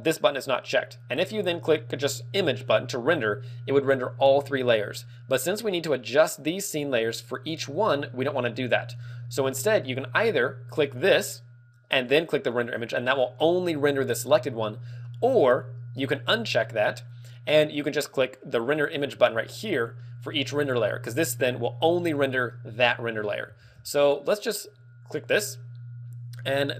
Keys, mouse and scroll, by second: 10.9 click, 12.1 click, 12.6 click, 20.0 middle click, 23.6 ctrl+w, 25.0 click.